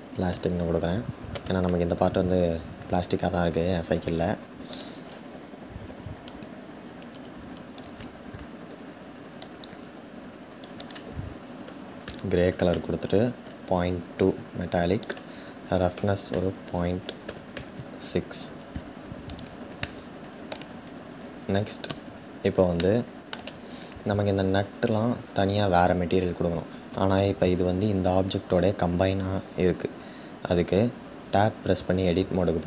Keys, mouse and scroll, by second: 9.4-19.0 drag, 19.4-20.8 middle drag, 20.8-21.4 scroll up 2, 21.4-22.5 scroll down 2, 22.5-26.8 shift+middle drag, 26.8-31.9 drag, 31.9 Tab.